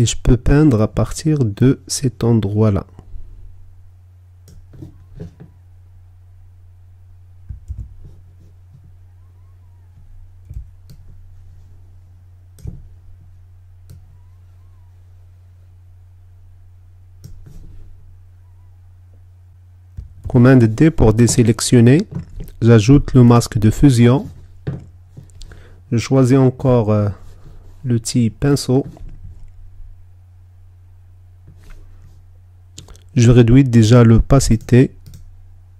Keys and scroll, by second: 7.3 super+z, 21.0 super+d.